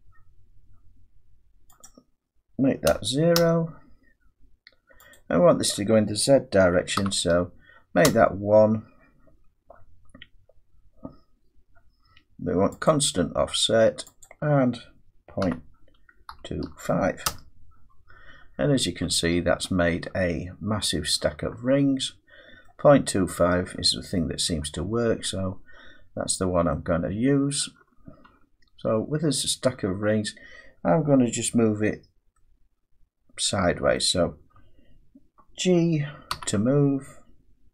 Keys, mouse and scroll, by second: 1.8 click, 2.9 typing, 3.3 Return, 5.1 click, 7.0 typing, 8.0 Return, 12.9 click, 14.2 click, 15.4-16.6 typing, 17.2 Return, 18.3-20.7 scroll down 14, 20.7-21.1 scroll down 3, 22.5-24.1 scroll up 6, 22.9 middle click, 24.2 middle click, 26.0-26.7 scroll down 3, 27.5 middle click, 27.8 Tab, 28.3 Tab, 28.8-30.2 scroll down 6, 33.9 middle click, 36.3 g.